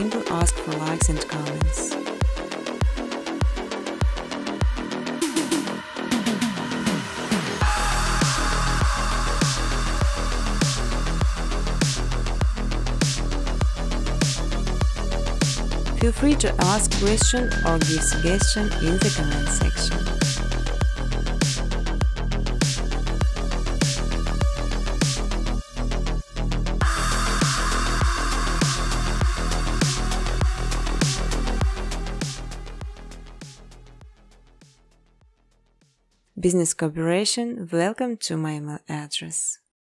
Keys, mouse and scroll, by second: 0.8 click, 1.6 space, 3.0-4.9 typing, 4.3 scroll, 5.1 middle click, 6.0 click, 6.3 ctrl+c, 6.5 ctrl+d, 10.0 scroll, 10.7 shift+click, 11.9 click, 14.5-17.3 typing, 15.8 click, 18.1 Return, 18.7-19.4 typing, 22.6-24.0 typing, 23.3 click, 25.4 space, 25.9 middle click, 26.2 space, 29.1 scroll, 29.6 space, 30.0 space, 30.8 space, 31.1 space, 31.3 scroll, 32.4 space, 32.9 space, 34.0 space, 34.5 space, 35.9-39.9 typing.